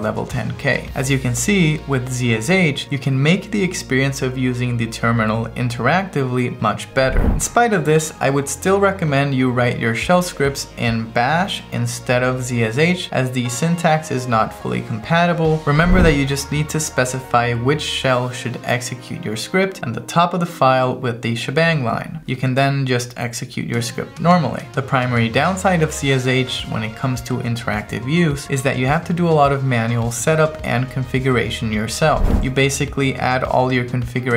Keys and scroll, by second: 0.4 1, 1.9 2, 22.3 /, 23.1 Right, 24.0 Return, 32.4 space, 32.7 shift+`, 33.1 Right.